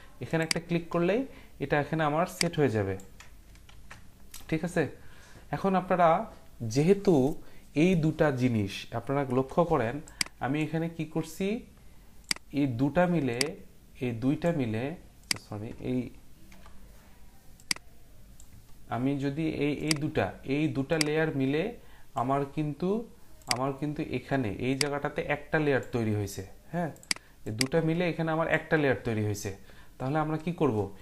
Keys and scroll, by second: 3.7 ctrl+z, 9.3 Print, 16.5 Print.